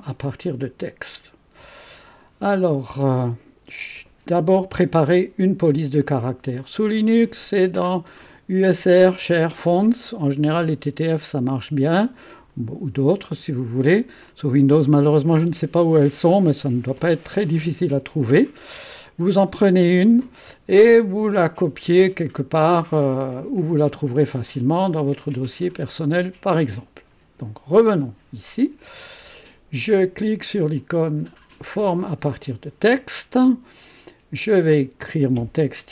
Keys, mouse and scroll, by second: 6.4 click, 10.5 click, 12.3 click, 27.5 click, 32.0 click, 34.4 click.